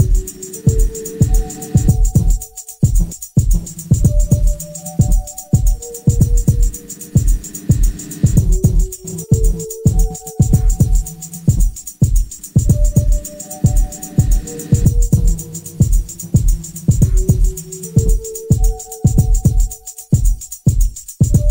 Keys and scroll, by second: 1.2 ], 2.6 4, 4.7 2, 5.7 Escape, 9.0 Escape, 18.3 ], 18.6 4.